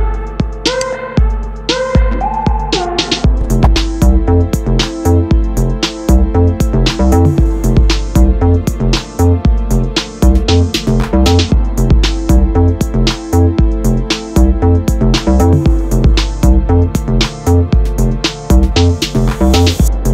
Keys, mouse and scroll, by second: 0.7 KP_3, 2.1 g, 5.1 KP_7, 6.6 g, 9.2-10.6 middle drag, 10.6 KP_3, 12.2 r, 13.0 s, 18.9 s.